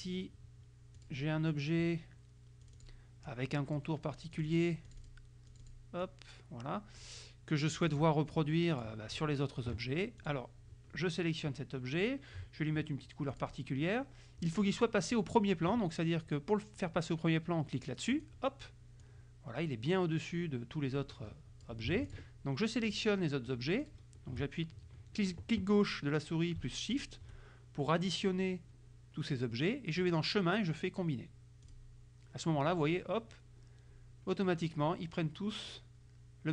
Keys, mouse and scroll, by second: 1.0 click, 2.7 click, 3.4 click, 4.5 click, 5.0 click, 5.6 click, 6.1-7.3 drag, 7.9 click, 8.5 click, 10.3 click, 13.4 click, 18.2 click, 19.1-21.9 drag, 22.1 shift+click, 23.0 shift+click, 23.9 shift+click, 27.0 shift+click, 30.1 click, 31.7 click.